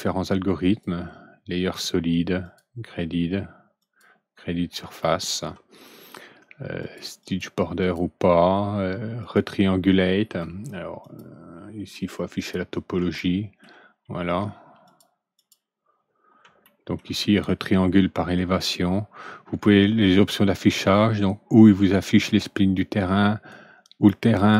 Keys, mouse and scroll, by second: 0.6 click, 2.4 click, 3.7 click, 4.9 middle click, 6.7 click, 7.1 click, 7.7 click, 9.1 click, 10.9 click, 12.3 click, 13.1 alt+middle click, 14.8 click, 15.3 click, 16.6 alt+middle click, 19.9 click, 22.1 click, 24.3 click.